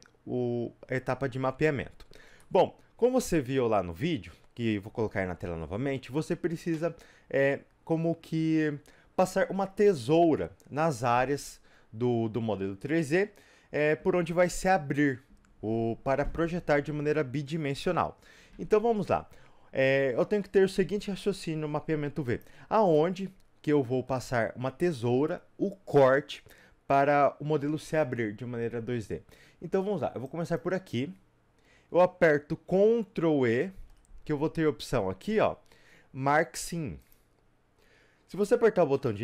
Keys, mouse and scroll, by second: 2.5-22.2 middle drag, 22.2 click, 22.9-30.5 middle drag, 30.5 click, 37.1 ctrl+e, 38.4 click.